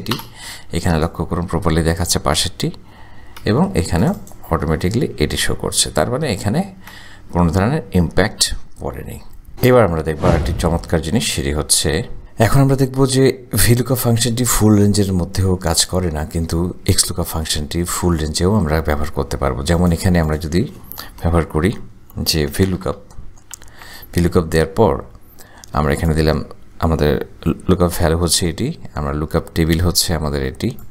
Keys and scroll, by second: 0.3 Return, 3.7 Return, 22.3-23.4 typing, 23.7 Tab, 28.1 ,.